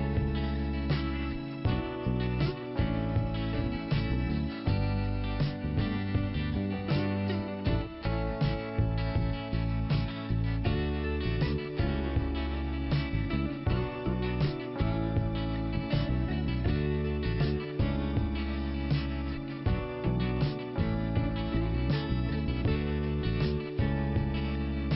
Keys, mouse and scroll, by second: 1.0 click, 2.7 click, 3.8 click, 4.2 click, 6.4 click, 6.9 click, 7.2 click, 8.1 click, 9.3 click, 11.3 click, 14.6 middle click, 17.6 middle click, 19.3 click.